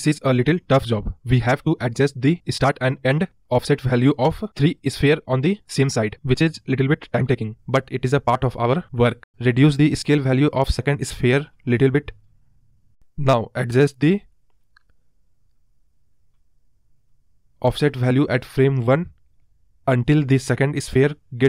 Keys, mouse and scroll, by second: 0.3-2.1 scroll down 1, 2.1-4.6 scroll down 1, 16.2-16.8 scroll up 1, 16.8 KP_Decimal, 17.9 scroll down 2, 19.6-21.4 drag.